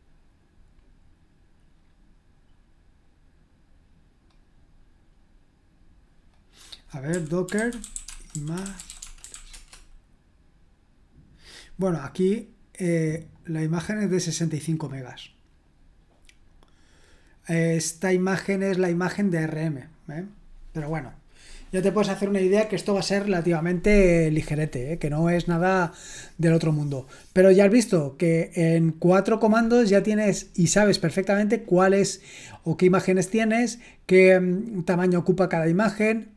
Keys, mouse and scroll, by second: 1.0-1.3 scroll down 2, 1.9-2.4 scroll down 1, 3.1-3.9 scroll down 1, 3.9 scroll down 1, 4.6 scroll down 1, 5.2-5.8 scroll down 2, 6.7 click, 6.9-9.8 typing, 13.3-16.5 drag, 20.0-20.7 scroll down 1.